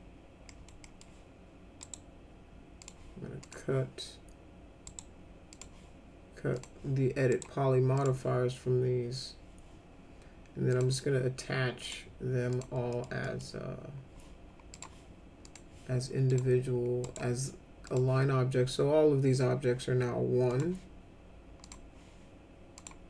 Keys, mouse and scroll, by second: 0.4 middle click, 0.8 middle click, 1.7 right click, 2.7 click, 3.4 click, 4.8 right click, 5.5 click, 6.5 click, 7.2 right click, 7.9 click, 10.7 click, 11.8 click, 12.5 click, 12.9 middle click, 13.2 middle click, 14.7 click, 15.4 click, 16.2 click, 17.0 right click, 17.8 click, 20.5 click, 21.6 click, 22.7 click.